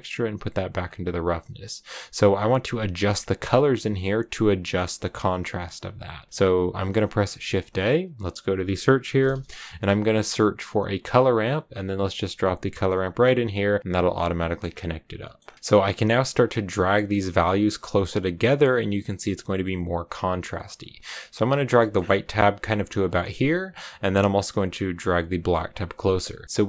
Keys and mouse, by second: 7.1 shift+a, 14.4 middle click, 15.2 middle click, 16.0-17.3 drag, 18.8 click, 20.9 click, 21.7 middle click, 23.0 middle click, 24.3-25.6 drag.